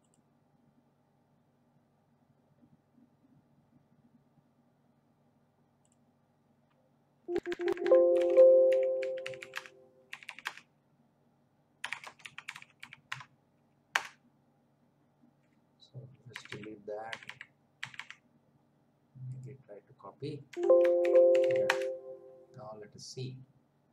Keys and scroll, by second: 6.7 Return, 7.3-10.1 typing, 10.4 Return, 11.5-13.2 typing, 13.9 Return, 16.3 d, 20.5 Escape, 20.7-21.9 typing.